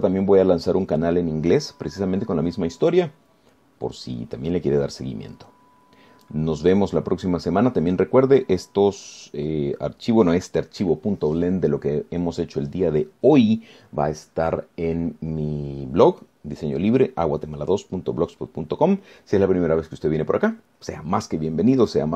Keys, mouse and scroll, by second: 7.8 scroll down 1, 10.9-11.2 scroll down 1.